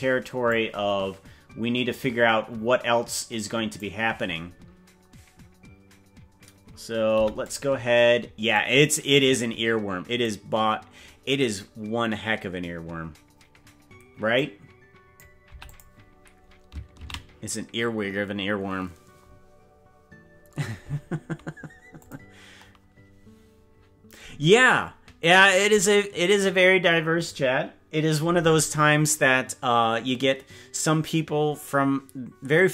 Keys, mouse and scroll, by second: 1.8-3.8 drag, 8.5-10.2 drag, 14.3 click, 18.5 ctrl+s.